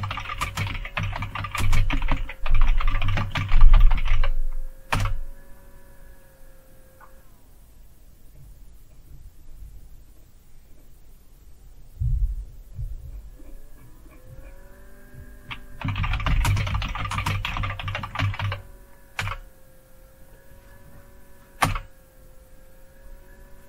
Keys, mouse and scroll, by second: 0.0-5.0 typing, 4.9 Return, 7.6-12.1 scroll up 2, 12.6 scroll down 3, 13.4-15.8 scroll down 5, 15.6-19.5 typing, 19.1 Return, 21.6 Return.